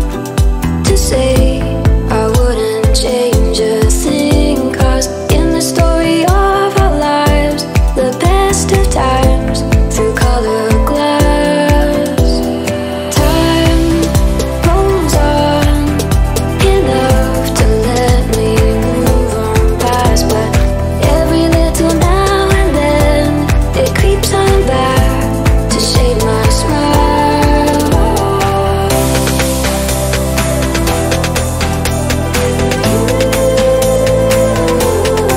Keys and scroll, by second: 14.2 ctrl+z.